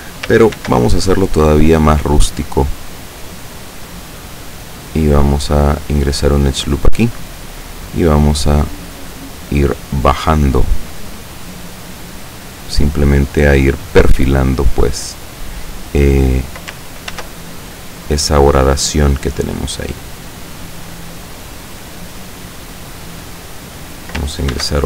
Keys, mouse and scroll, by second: 0.6 ctrl+r, 2.1 click, 5.9 click, 6.9 right click, 7.7-10.4 drag, 11.0 right click, 11.5-13.0 drag, 13.4 right click, 14.1 click, 17.2 ctrl+r, 17.7 ctrl+click, 19.8 click, 20.5 right click, 21.3-23.4 drag, 24.6 ctrl+r.